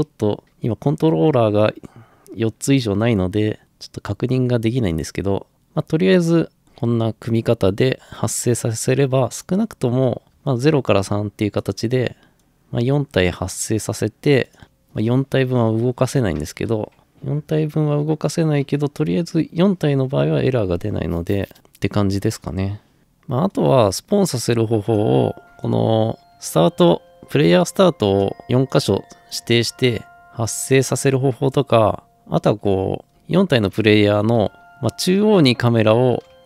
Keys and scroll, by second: 10.3 Return, 10.3 3, 14.4-15.1 typing, 19.2 Escape, 33.1-36.4 typing.